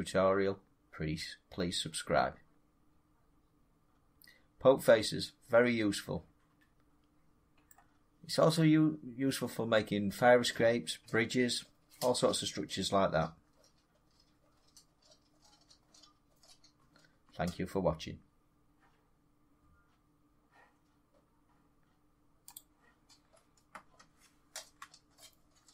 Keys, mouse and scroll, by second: 7.6-12.7 middle drag, 22.4-25.0 drag.